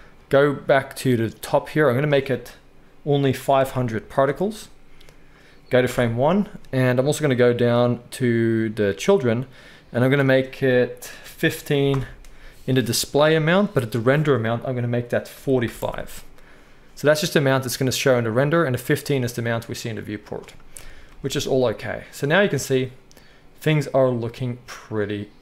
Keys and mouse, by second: 3.7 0, 5.9 shift+Left, 20.7 KP_1, 21.1 space.